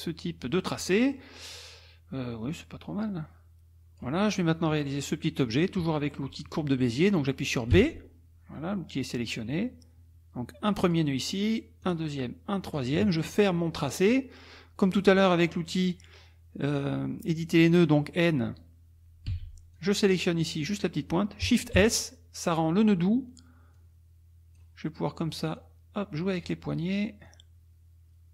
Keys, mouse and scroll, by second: 0.7 middle click, 1.1 click, 3.0-4.2 drag, 7.7 b, 10.8 click, 11.8 click, 12.7 click, 14.0 click, 19.3 n, 19.8 click, 21.8 shift+s, 23.8 click, 25.6 click, 27.3-28.3 drag.